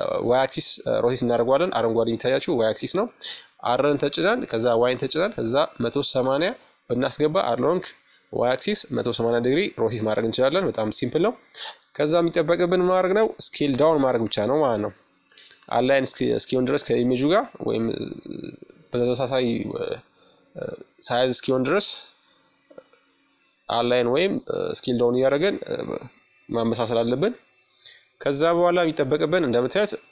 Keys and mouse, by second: 0.3 z, 1.6 r, 6.1 KP_1, 7.4 z, 8.5 s, 13.5-15.2 middle drag, 14.8 s, 19.2 g, 25.8 z, 27.1-28.9 middle drag, 28.0 KP_5, 29.3-30.1 middle drag.